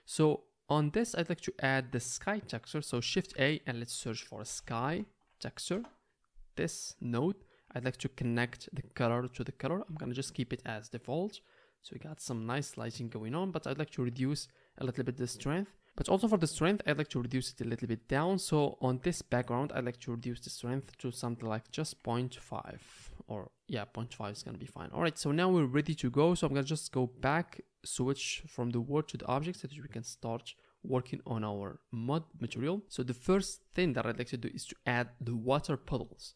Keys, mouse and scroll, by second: 3.1 shift+a, 7.1-7.9 drag, 7.9-9.0 right drag, 9.0-18.2 middle drag.